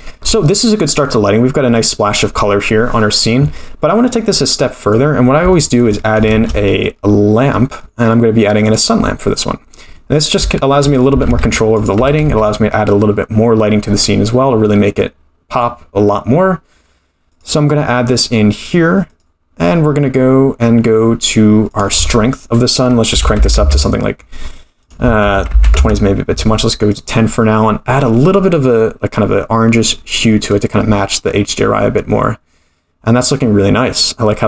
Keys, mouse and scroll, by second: 4.1-4.6 scroll up 3, 4.6-4.9 middle drag, 5.5 shift+middle drag, 6.3 shift+a, 10.0-10.4 middle drag, 10.5 shift+middle click, 11.1 g, 12.0 r, 19.1 click, 21.7-24.3 drag, 24.8-26.4 drag, 26.9 click.